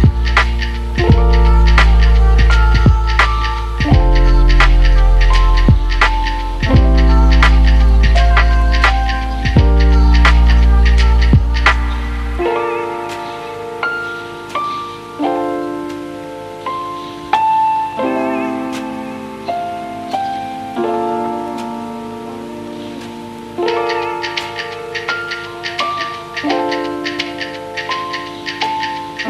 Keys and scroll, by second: 2.3 shift+v, 3.2 v, 13.3 z.